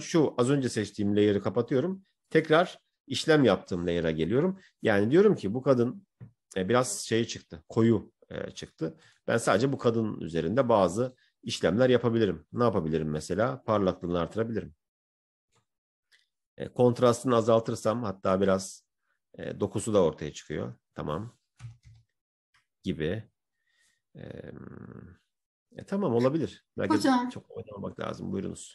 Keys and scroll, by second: 16.1 ctrl+-.